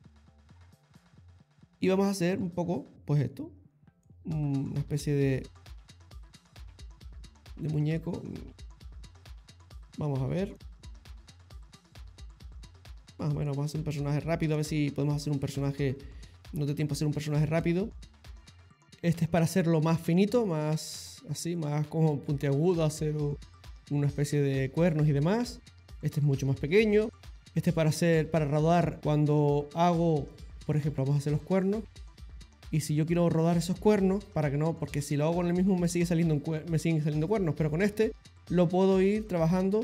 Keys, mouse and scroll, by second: 0.5 click, 3.3 click, 4.0 click, 4.8 click, 5.5 click, 6.9 middle click, 8.9 click, 9.4 click, 9.9 middle click, 10.6 click, 12.3 click, 13.5 click, 14.7 middle click, 15.8 click, 16.3 click, 17.0 click, 17.7 middle click, 18.9 click, 19.6 click, 20.4 click, 21.7 middle click, 21.9 middle click, 23.9 ctrl+z, 30.8 click, 31.6 click, 37.7 click, 38.8 click, 39.5 click.